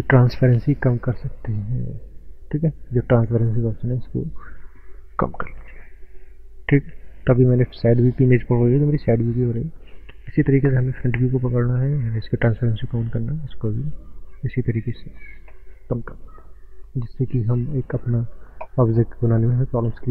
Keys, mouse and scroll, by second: 3.2 click, 10.6 click, 12.4 click, 17.1 click.